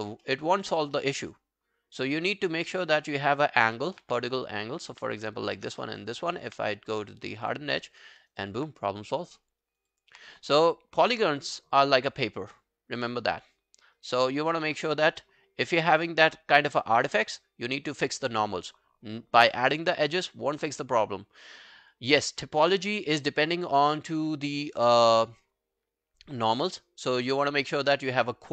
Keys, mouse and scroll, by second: 0.3 alt+middle click, 0.5 alt+right click, 0.7 alt+click, 1.0 alt+right click, 1.3 alt+middle click, 2.1-2.5 alt+scroll down 1, 2.5 alt+middle click, 2.8 alt+right click, 3.1 alt+middle click, 3.5 alt+click, 3.8 alt+middle click, 3.9 alt+scroll down 1, 4.1 q, 4.2 right click, 5.5 shift+click, 5.8 alt+middle click, 6.0 alt+right click, 7.8 double click, 8.0 alt+middle click, 8.2 alt+right click, 8.4 alt+click, 9.4 alt+middle click, 9.7 alt+right click, 9.9 alt+click, 14.0 right click.